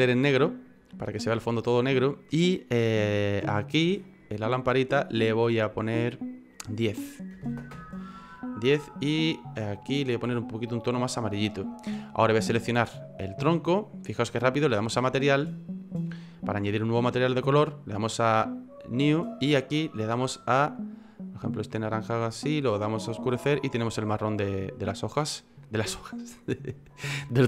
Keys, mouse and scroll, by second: 0.2 click, 4.0 click, 6.5 click, 9.0 click, 12.5 right click, 15.5 click, 18.0 click, 24.5-25.0 scroll up 1, 25.0 middle click, 25.0-25.4 scroll up 2, 25.9 click.